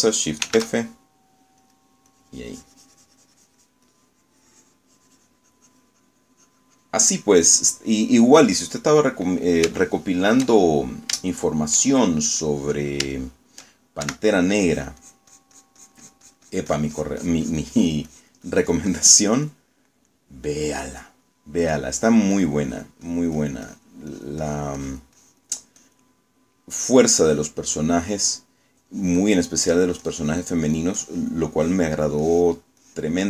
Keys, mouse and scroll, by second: 1.5 shift+f, 2.7 click, 3.2-8.4 drag, 8.5 middle click, 9.3 middle click, 10.8 shift+click, 11.6 shift+click, 12.3 shift+click, 13.1 shift+middle click, 13.8 middle click, 15.1 shift+3, 15.7-19.1 drag, 20.5 middle click, 23.1 click, 25.2-27.3 drag, 27.3 middle click, 28.3 click, 28.9 click, 30.0 click, 31.8 click, 32.2 click, 32.7 click.